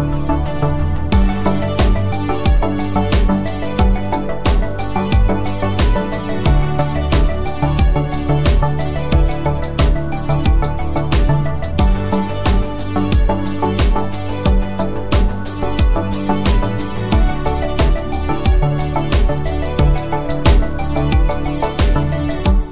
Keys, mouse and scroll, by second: 0.9-1.8 scroll up 1, 1.8-3.0 click, 4.0 ctrl+alt+click, 6.8-8.7 click, 13.1-14.4 scroll down 1, 14.4 space, 14.6 click, 14.9-15.5 space.